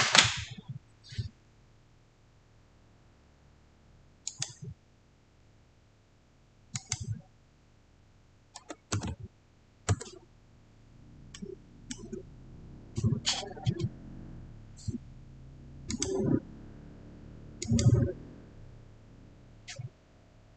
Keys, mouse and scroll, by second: 4.1 click, 6.6 click, 6.6 click, 8.5 typing, 9.8 Return, 11.2-14.0 middle drag, 15.8 middle click, 15.8 click.